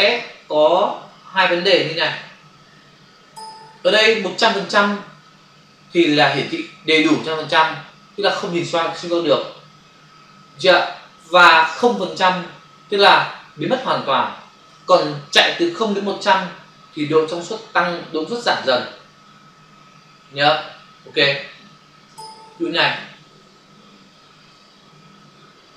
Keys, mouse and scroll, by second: 0.1 click, 1.7 click, 2.8 typing, 22.0-23.0 typing, 22.9 click, 24.5 f.